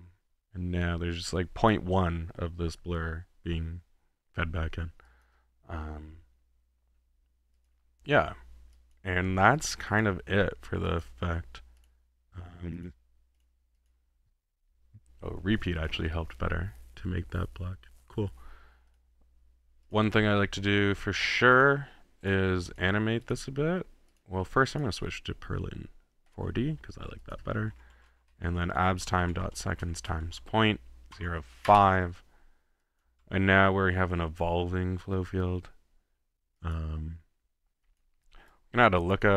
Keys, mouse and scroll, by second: 5.1-5.7 drag, 6.6 middle click, 7.5 click, 8.1 middle click, 8.7-9.2 drag, 9.5-10.2 drag, 10.4 middle click, 10.9-11.3 drag, 11.8 click, 12.7 click, 13.3 click, 13.9 click, 18.9-19.4 drag, 19.8-20.4 drag, 21.5-22.1 drag, 22.2 click, 22.7 click, 23.3 click, 24.1 click, 24.7 click, 26.3 click, 27.2 drag, 27.7-28.4 typing, 31.7 Up, 32.8 click, 33.0-33.8 typing, 35.8 middle click, 36.6 click, 37.8 click, 38.9 click, 39.3 drag.